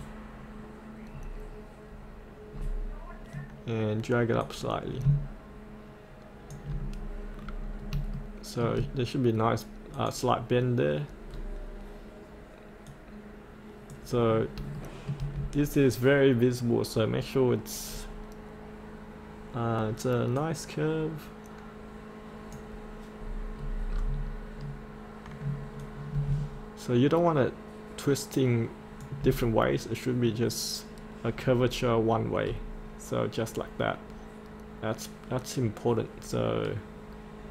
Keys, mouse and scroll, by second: 1.9-2.6 scroll up 1, 2.6-3.2 scroll down 1, 4.4 click, 7.0-7.9 scroll up 1, 8.2 shift+middle click, 9.9 click, 11.3-13.0 scroll down 1, 13.0 click, 14.2 scroll up 1, 14.8 shift+middle click, 18.0-20.4 scroll down 1, 20.4-23.2 drag, 23.2-25.8 scroll down 1, 25.8 click, 32.5 scroll up 1, 35.2-36.1 scroll up 1.